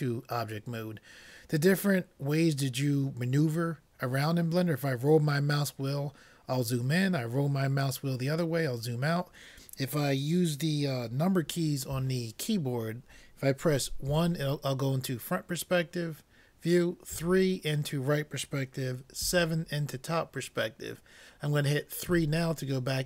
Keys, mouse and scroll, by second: 1.8-4.1 middle drag, 5.0-7.1 middle drag, 7.1-10.5 middle drag, 14.1 KP_1, 17.2 KP_3, 19.3 KP_7, 22.2 KP_3.